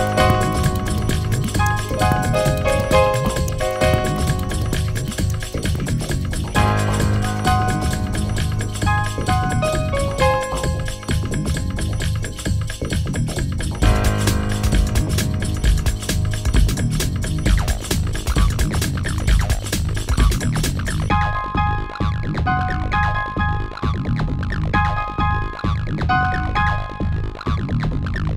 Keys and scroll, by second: 0.7 3.